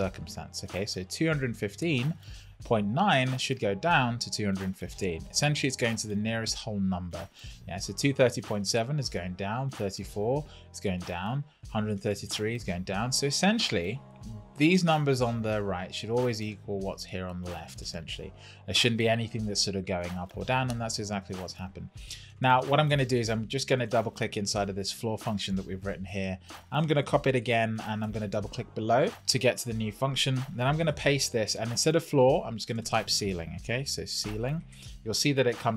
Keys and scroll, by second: 27.4 super+c, 30.8 super+v, 33.7 shift+c.